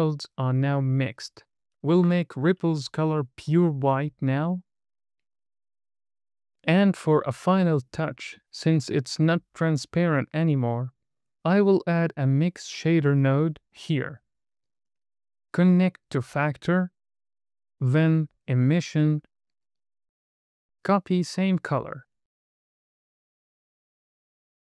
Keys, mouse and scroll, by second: 0.3 click, 2.2-2.6 scroll up 3, 3.0 middle click, 3.8 click, 11.4 shift+a, 15.0 click, 16.5 click, 17.8 shift+a, 20.4 click, 21.0 middle click, 21.0 scroll down 2, 22.5 super+c, 24.0 super+v.